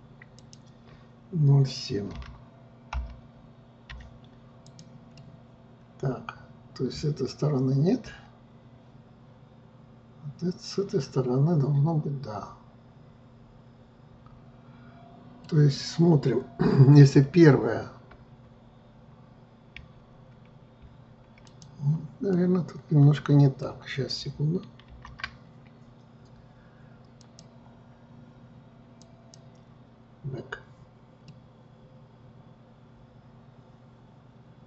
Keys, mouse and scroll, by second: 5.3-12.1 middle drag, 17.2 KP_1, 19.9 KP_1, 21.6 click, 22.5-25.0 middle drag, 25.0 ctrl+z, 27.3-31.4 drag, 31.4-34.6 middle drag.